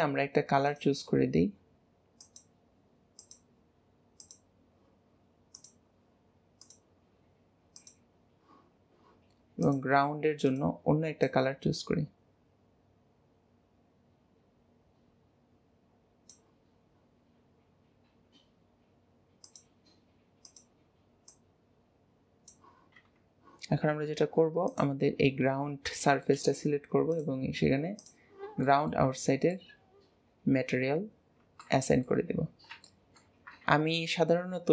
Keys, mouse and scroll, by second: 0.6 click, 5.5-6.7 drag, 9.6 click, 10.4 click, 19.4-20.5 drag, 23.0 Tab, 24.6 click, 26.0-27.2 shift+middle drag, 27.2 click, 27.9 click, 28.7 middle click, 29.0 Tab, 29.5-32.2 middle drag, 32.2-32.8 scroll up 1, 32.8-34.7 shift+middle drag.